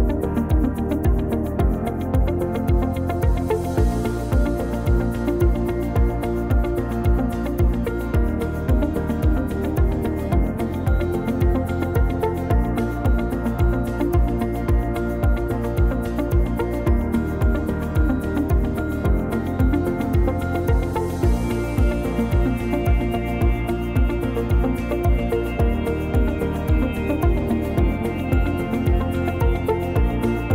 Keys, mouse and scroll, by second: 0.4-1.1 scroll up 3, 1.2 shift+middle click, 2.8 click, 3.3-3.8 scroll up 2, 4.7 r, 7.2 ctrl+z, 9.1 r, 10.3 c, 12.2 click, 13.5 click, 14.6 middle click, 15.8 click, 16.8 shift+middle click, 17.5 click, 17.8 shift+middle click, 19.0 click, 20.1 alt+z, 20.4 scroll up 2, 21.0 click, 22.6 s, 25.1 click, 26.1 click, 26.8 click.